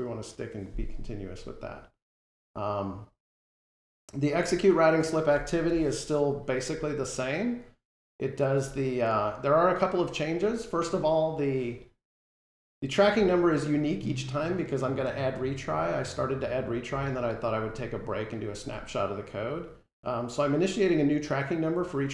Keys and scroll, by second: 5.6 F12.